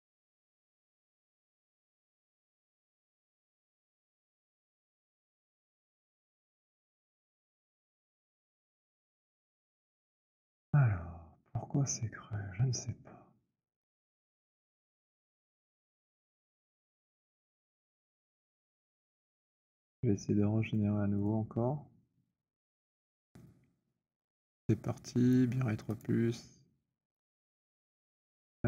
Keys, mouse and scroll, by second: 1.7 alt+click, 1.9-6.7 alt+scroll, 9.5 alt+click, 16.6 alt+click, 17.2 alt+middle click, 18.0 alt+click, 20.1 right click, 20.7 click, 21.2 click, 21.6 alt+click, 22.8 Delete, 23.3 click, 26.0 click, 27.5 click, 28.3 click.